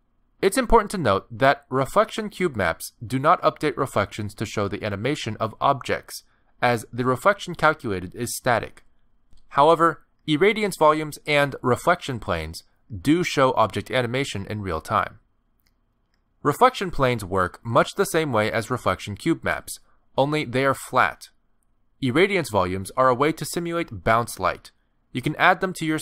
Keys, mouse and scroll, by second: 1.4 middle click, 2.6 click, 3.0 middle click, 3.5 g, 4.5 middle click, 5.6 g, 8.8 middle click, 9.1-9.5 scroll down 3, 9.6 shift+middle click, 9.8 click, 10.4 click, 11.5 click, 13.0 shift+a, 15.5 s, 16.8 g, 18.7 click, 19.3 g, 23.5 middle click, 23.8 shift+a, 24.7 s, 25.1 g, 25.8 scroll down 2, 25.9 middle click.